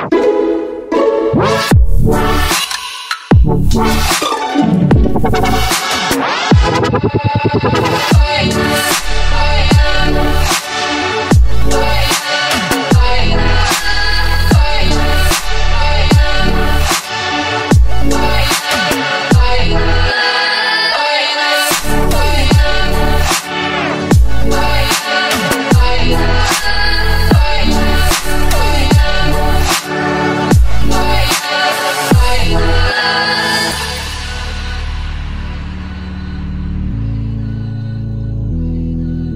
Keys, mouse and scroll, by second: 26.1 super+z, 35.1 super+z, 36.1 super+z.